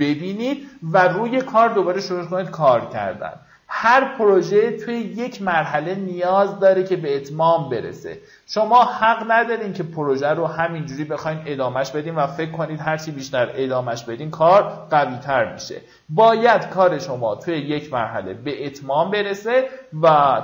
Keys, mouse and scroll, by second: 2.8-3.4 alt+scroll down 1, 5.0-12.0 drag.